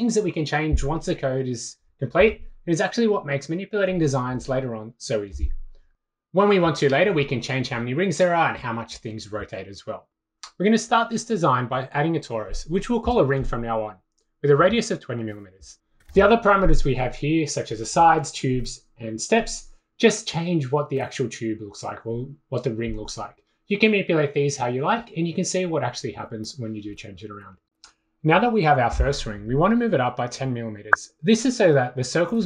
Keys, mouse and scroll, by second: 0.3 click, 3.2 click, 3.7 click, 4.7 click, 5.9-7.4 typing, 7.9 click, 14.2 click, 14.3 click, 14.9 click, 15.7-16.6 typing, 18.3 click, 18.5 typing, 20.0 click, 20.0 2, 20.3 click, 21.0 6, 22.1 click, 23.3 click, 26.2 drag, 26.3-28.2 typing, 26.4 Return, 26.6 click, 27.4 click, 27.5 click, 27.7 click, 27.8 click, 28.9 click, 30.6 click, 31.2 click, 32.0-32.4 typing.